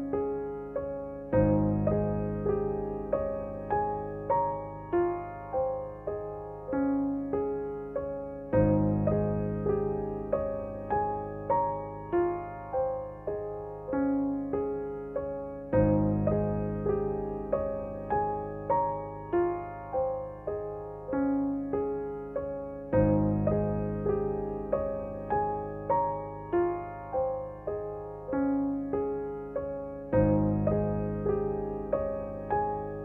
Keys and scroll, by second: 3.9 x, 14.4 g, 15.0 z, 18.9 r.